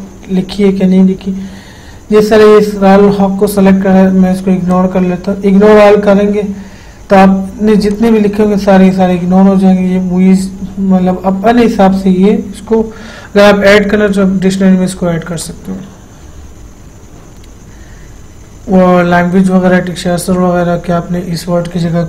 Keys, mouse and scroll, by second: 5.0 click, 5.0 click, 8.2 click, 15.7 click, 15.8 click.